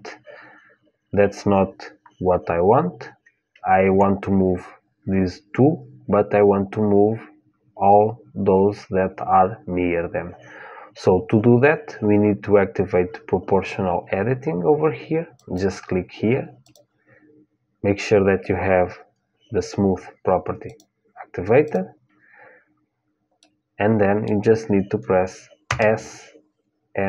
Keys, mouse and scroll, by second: 15.1-18.7 drag, 21.4-23.4 drag, 23.1-25.1 middle drag, 25.4 s.